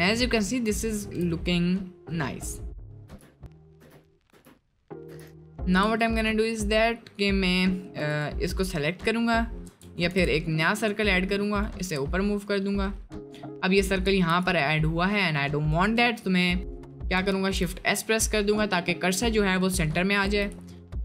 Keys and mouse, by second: 0.3 middle click, 0.6 middle click, 0.9 shift+middle click, 1.4 middle click, 2.0 middle click, 3.1 Tab, 3.7 click, 3.8 Tab, 4.0 click, 5.3-6.2 drag, 6.2 middle click, 8.1 click, 9.7 Tab, 10.1 shift+a, 11.8 g, 12.9 middle click, 13.3-13.6 middle drag, 14.1 ctrl+z, 17.0 middle drag, 17.4 shift+c, 18.1 middle drag, 19.7 middle click.